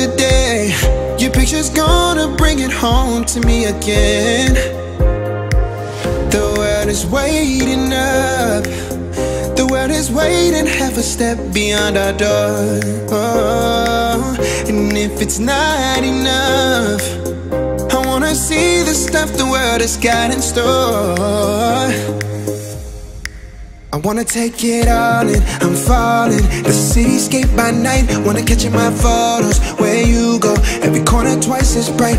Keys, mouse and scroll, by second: 0.1 a, 0.2-1.4 scroll up 1, 1.4 click, 2.3 click, 2.3 Escape, 3.2 click, 4.5 space, 5.6 click, 12.1 click, 15.9 space, 16.1 e, 16.6 click, 16.7 click, 17.2 space, 18.1 a, 18.9 click, 20.9 space, 21.2 e, 21.4 click, 22.9 space, 23.2 click, 23.6-24.4 scroll down 1, 24.8 click, 25.1-25.6 scroll down 1, 26.2 shift+middle click, 26.6-27.2 scroll down 1, 27.2 middle click, 27.4 scroll up 1, 28.1 shift+click, 30.6 shift+middle click, 31.5 scroll up 1, 32.0 click.